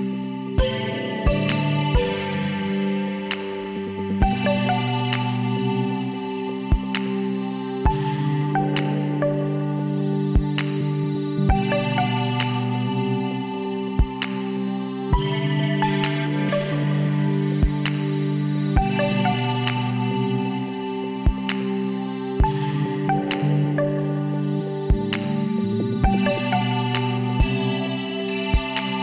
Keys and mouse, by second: 1.7 w, 6.1-7.8 middle drag, 7.8-9.1 drag, 9.1-10.2 middle drag, 13.7 shift+d, 14.9 s, 18.6 e, 22.3 middle click, 25.7-29.0 drag.